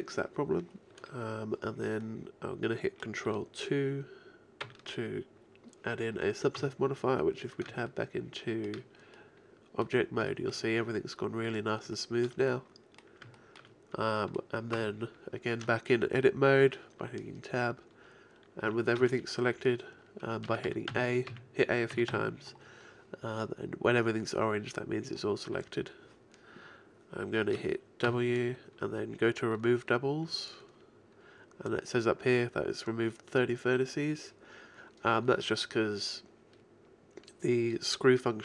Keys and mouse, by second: 2.1-3.9 middle drag, 4.7 ctrl+2, 6.6 Tab, 14.8 Tab, 18.7 a, 19.0 a, 20.5-22.1 typing, 28.1 w.